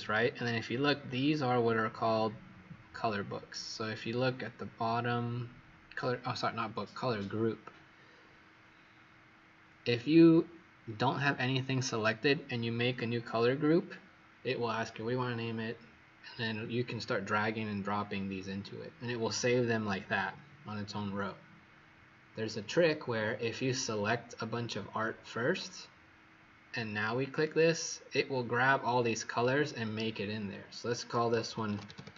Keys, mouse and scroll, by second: 25.7 click, 31.5-32.1 typing.